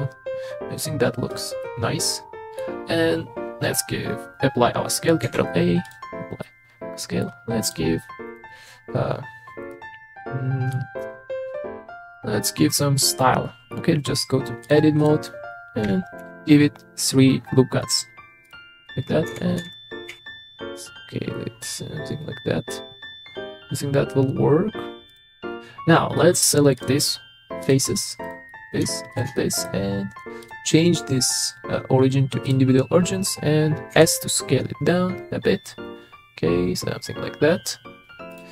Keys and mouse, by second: 1.6-2.6 middle drag, 5.2 ctrl+a, 6.4-7.2 middle drag, 9.7-10.7 middle drag, 14.6-15.1 drag, 16.2 ctrl+r, 19.3 s, 19.6 x, 20.1 y, 25.1 click, 26.2 middle click, 26.8 click, 27.6 click, 28.2 click, 28.5 middle click, 29.1 shift+middle click, 29.3 click, 30.5-32.5 drag, 33.9 s, 38.3 click.